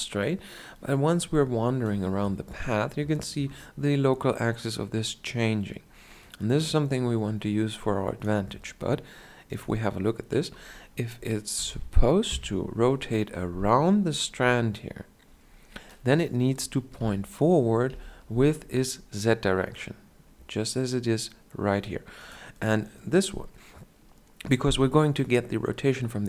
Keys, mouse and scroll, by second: 0.6-11.4 drag, 11.4 r, 16.9 KP_2, 17.8 KP_1.